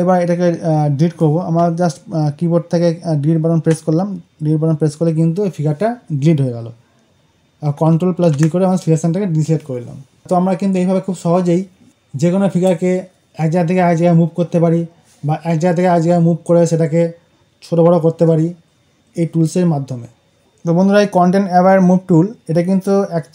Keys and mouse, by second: 8.1 ctrl+d, 20.3 right click.